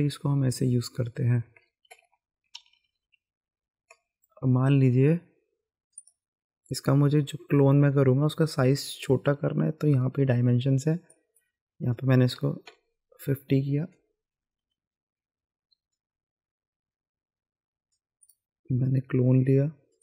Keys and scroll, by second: 1.8 ctrl+z, 2.6 ctrl+z, 3.2 ctrl+z, 12.4 KP_5, 12.7 KP_0.